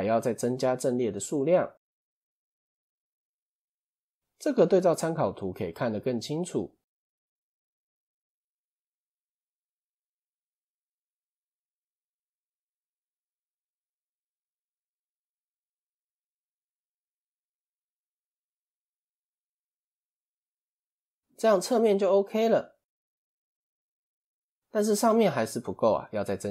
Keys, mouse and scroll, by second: 2.7 click, 3.6 scroll up 1, 7.1 click, 8.7 click, 9.5 click, 10.4 click, 11.7 click, 12.5 click, 13.3 click, 14.4 click, 15.7 click, 16.4 click, 17.1 click, 18.3 click, 18.9 click, 19.9 click, 23.3 shift+middle click, 24.1 click, 25.8-26.5 shift+middle drag.